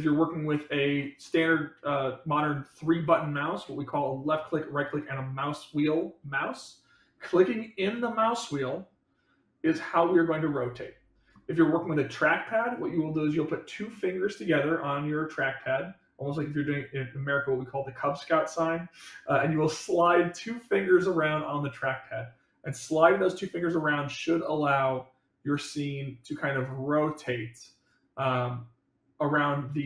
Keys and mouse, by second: 7.9-11.3 middle drag, 23.2-29.8 middle drag.